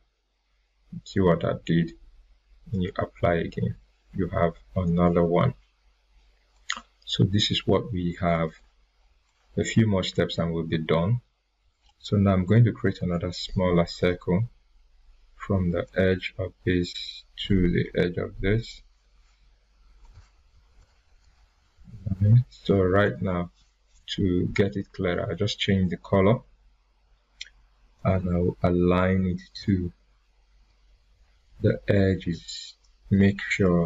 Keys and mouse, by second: 2.7 click, 6.5 click, 8.5-10.5 drag, 15.8-18.9 drag, 24.8 right click, 27.9-32.1 drag, 33.7-33.8 drag.